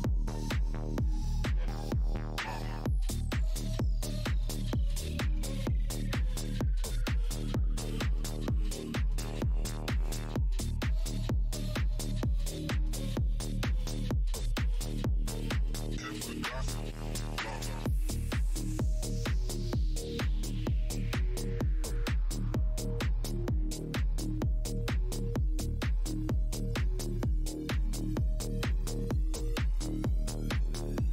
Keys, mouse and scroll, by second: 0.1 click, 0.8 shift+Tab, 0.9-2.9 typing, 2.9 Tab, 3.6 Tab, 4.3 click, 4.7 Tab, 5.9 click, 6.0 Tab, 6.4-9.2 typing, 7.6 Tab, 9.2 Tab, 9.7 click, 9.8 Tab, 11.1 click, 11.2 Tab, 11.5 alt+click, 13.8 alt+click, 14.2 Tab, 16.5 scroll, 16.5 scroll down 1, 17.2 scroll up 1, 17.7-18.0 scroll, 18.1 click, 18.1 Tab, 18.5 click, 18.6 Tab, 18.9-20.0 typing, 20.1 Tab, 21.7 click, 23.2 click, 23.9 click, 24.7 click, 24.8 Tab, 25.5 click, 26.5 click, 27.9 click, 28.0 Tab.